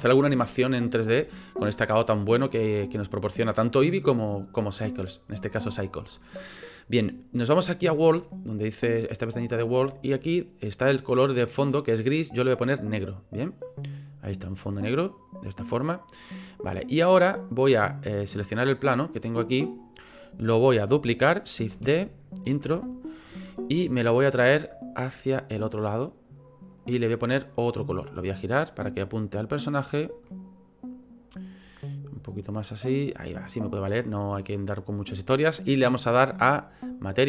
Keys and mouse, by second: 9.6 click, 9.8-12.5 middle drag, 12.5 click, 12.7-14.5 middle drag, 15.3 click, 17.5 click, 18.1 click, 18.6 click, 19.1 click, 21.7 shift+d, 23.4 click, 23.8 click, 25.0 click, 26.0 click, 26.3 click, 27.2 click, 27.4 click, 29.3 click, 29.8 click, 30.3 click, 30.4-31.6 middle drag, 32.2 middle click, 32.3 click, 32.4 middle click, 32.5 click, 32.6 middle click, 32.6 click, 32.7 middle click, 32.8 click, 36.4 click.